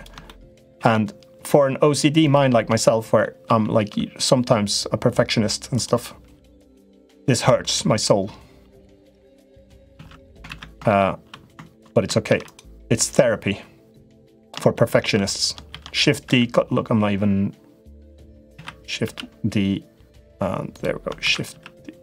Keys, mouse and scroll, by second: 0.0 shift+middle click, 0.5 shift+d, 2.7 middle click, 3.8 shift+d, 6.1 g, 7.6 g, 9.9 ctrl+z, 10.2 ctrl+z, 10.6 shift+middle click, 12.0 shift+d, 12.7-14.2 drag, 14.6 middle click, 15.5 shift+d, 18.3 shift+d, 21.1 shift+d.